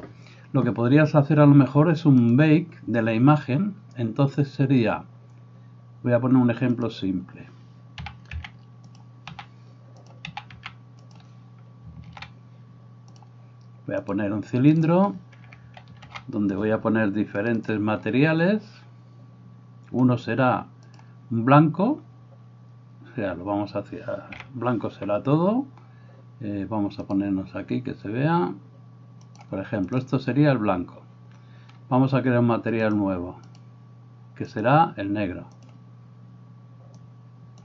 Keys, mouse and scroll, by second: 8.0 s, 10.3 s, 12.2 ctrl+a, 14.1-17.7 drag, 16.1 ctrl+r, 20.9-27.3 drag, 24.3 a, 29.3-35.9 drag.